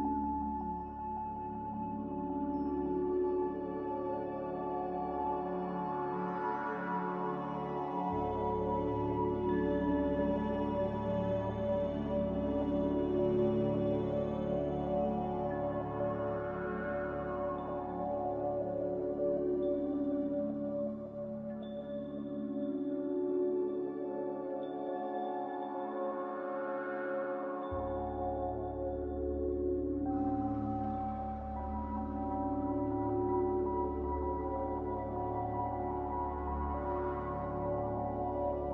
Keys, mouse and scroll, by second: 1.1-1.9 typing, 10.2-11.0 typing, 13.9 Escape, 14.0 Escape, 14.2 Escape, 21.3-22.2 typing, 26.4 a, 29.9 z, 32.9-33.7 typing.